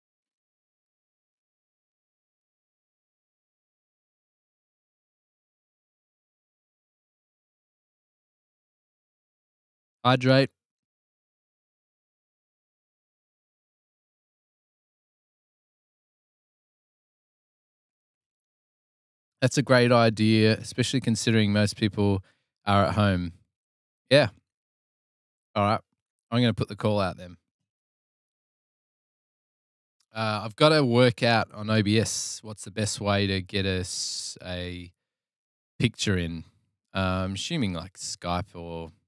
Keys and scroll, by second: 38.1 super+Tab, 38.3 super+Tab, 38.5 super+Tab.